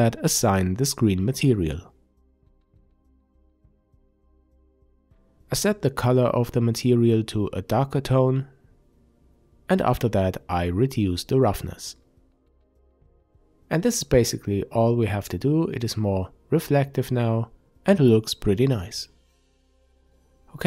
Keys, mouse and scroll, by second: 2.1 Tab, 4.9 click, 11.3-14.8 drag, 15.1-18.9 middle drag, 18.9 click, 19.3-19.7 middle drag, 19.7 click.